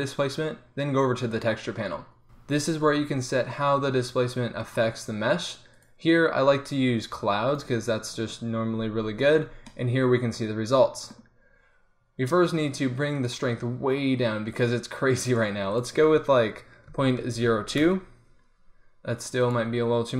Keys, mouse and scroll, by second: 4.6-7.6 drag, 9.5 middle click, 9.8 click, 13.0 middle click, 18.3-19.4 middle drag.